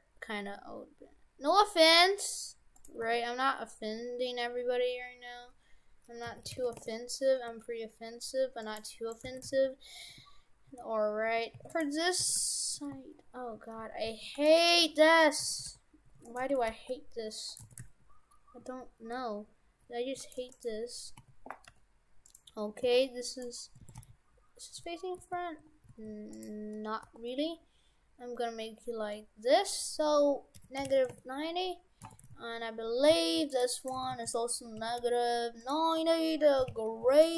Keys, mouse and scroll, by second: 3.1 r, 7.5 g, 9.2 right click, 9.3 shift+f, 12.3 shift+f, 14.6 right click, 14.9 g, 15.5 shift+f, 16.5 Tab, 16.7 g, 17.7 shift+f, 20.4 Tab, 20.6 right click, 21.2 a, 21.7 g, 22.9 r, 23.9 shift+f, 27.1 r, 32.1 shift+f, 33.8 right click, 34.0 shift+f, 34.8 a, 35.1 g, 36.0 r.